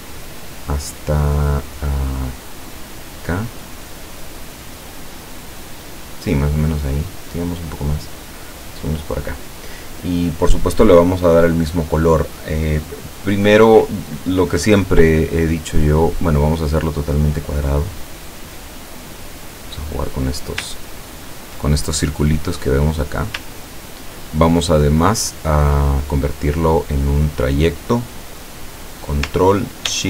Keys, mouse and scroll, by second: 17.9-18.9 drag, 19.2-20.6 drag, 20.9-21.5 ctrl+scroll up 2, 22.3 click, 23.6-24.3 ctrl+scroll down 2.